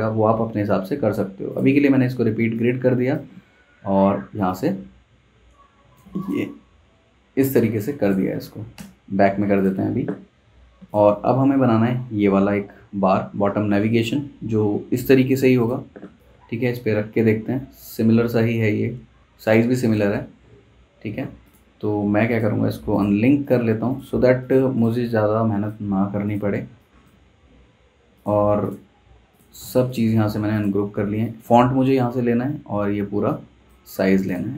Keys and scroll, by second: 8.7 shift+super+[, 20.1 super+z, 27.6 super+z, 31.7 super+z, 34.1 super+z.